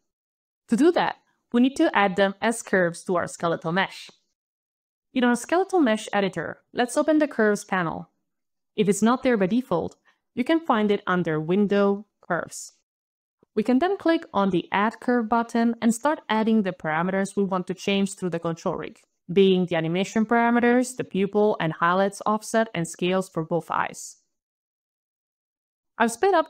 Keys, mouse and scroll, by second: 8.0 alt+click, 10.5 alt+click, 13.2 alt+click, 14.6 alt+click, 17.8 alt+shift+l, 18.2 alt+shift+-, 18.4 alt+shift+e, 18.5 alt+y, 18.7 alt+shift+-, 18.8 alt+shift+a, 18.8 alt+n, 18.8 alt+i, 18.9 alt+m, 19.0 alt+t, 19.0 alt+i, 19.0 alt+o, 19.1 alt+n, 19.1 alt+Return, 20.5 alt+click, 20.8 alt+click, 22.1 alt+click, 23.5 alt+shift+r, 23.7 alt+shift+-, 24.0 alt+shift+e, 24.2 alt+y, 24.4 alt+shift+-, 24.5 alt+shift+a, 24.5 alt+n, 24.5 alt+e, 24.6 alt+i, 24.6 alt+o, 24.6 alt+n, 24.7 alt+Return, 24.9 alt+scroll down 7, 25.2 alt+click, 25.2 alt+click, 25.3 alt+click, 25.4 alt+shift+l, 25.4 alt+shift+-, 25.5 alt+shift+e, 25.5 alt+shift+y, 25.5 alt+BackSpace, 25.6 alt+shift+-, 25.6 alt+shift+x, 25.6 alt+shift+-, 25.7 alt+shift+o, 25.8 alt+f, 25.9 alt+f, 25.9 alt+s, 26.0 alt+t, 26.1 ctrl+alt+a, 26.2 ctrl+alt+c.